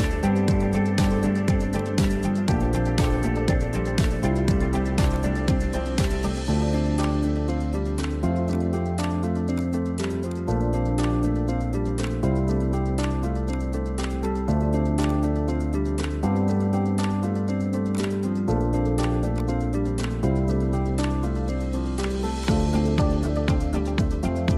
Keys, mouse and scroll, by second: 0.0 scroll down 1, 0.1 middle click, 0.9 ctrl+i, 1.8 p, 2.2 Tab, 2.8 click, 5.1 click, 5.6 Tab, 6.4 a, 7.1 drag, 8.6-10.4 drag, 10.8 Tab, 11.0 middle click, 11.3 scroll down 3, 11.6-12.1 shift+middle drag, 12.1 click, 13.1-14.2 drag, 15.3-16.4 drag, 16.4 middle click, 16.7 scroll up 3, 17.0-18.1 middle drag, 18.1 click, 19.1 click, 21.6 `, 22.1 scroll down 2, 22.3 click.